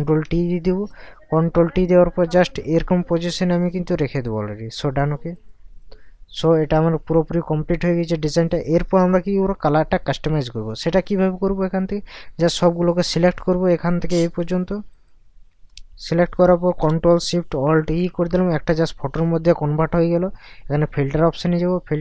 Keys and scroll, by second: 0.0 ctrl+t, 17.8 ctrl+alt+shift+e.